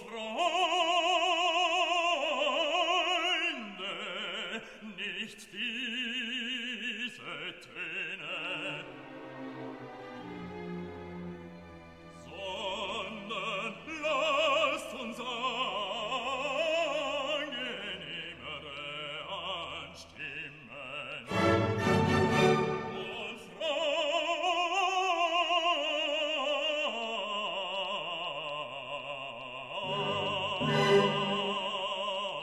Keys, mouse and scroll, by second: 0.4-2.0 typing, 2.6 click, 3.5 scroll down 1, 5.0 click, 9.5 click, 10.5 click, 11.3 2, 11.7 0, 12.4 click, 13.2 4, 13.6 0, 14.4 click, 15.1 click, 16.3-17.4 drag, 18.8 click, 20.1 2, 20.6 0, 21.6-22.6 drag, 22.7 scroll down 1, 23.3 scroll up 1, 24.6 click, 25.3 click, 25.9 click, 26.6-27.9 drag, 29.0 click, 31.2 click, 32.2 click.